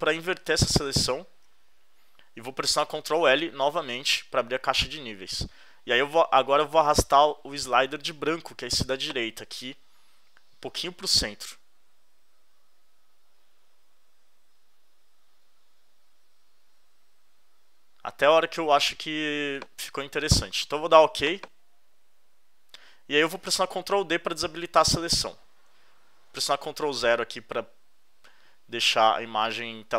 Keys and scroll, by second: 0.8 shift+super+i, 3.6 super+l, 24.7 super+d, 26.8 super+0.